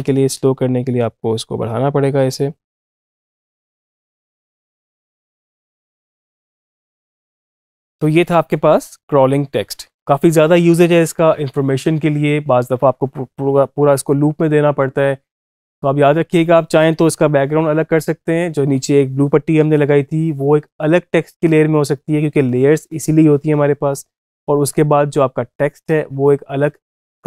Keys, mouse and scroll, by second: 7.4 space.